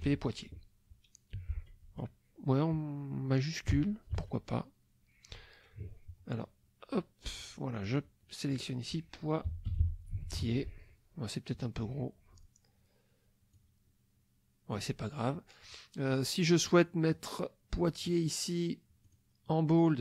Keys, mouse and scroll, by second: 0.0-1.3 typing, 1.8 Caps_Lock, 3.7 Tab, 4.1 Caps_Lock, 7.3 click, 7.8 click, 9.2-10.9 typing, 13.5-15.0 drag, 17.1 click, 19.1 click.